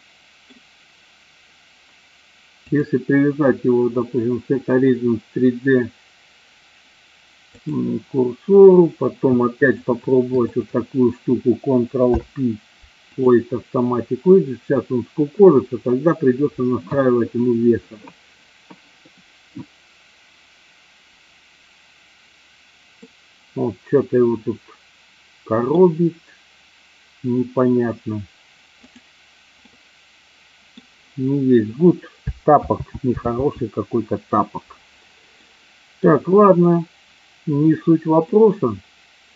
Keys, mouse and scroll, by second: 0.0 middle click, 2.6-7.7 drag, 10.5 shift+click, 12.0 ctrl+p, 23.0-24.4 middle drag, 24.6-25.7 middle drag, 29.6-30.9 middle drag, 32.6 ctrl+z, 33.2 ctrl+z, 35.4 middle click, 36.5 click, 38.2-39.3 middle drag.